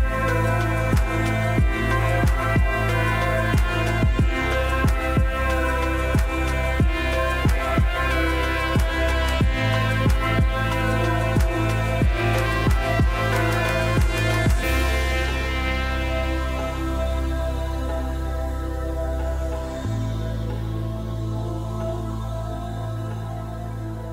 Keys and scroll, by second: 19.0 r.